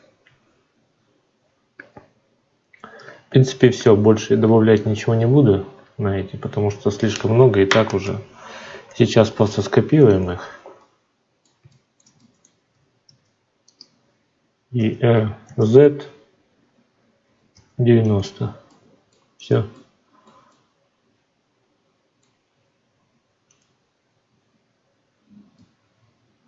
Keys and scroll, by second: 12.9 shift+d.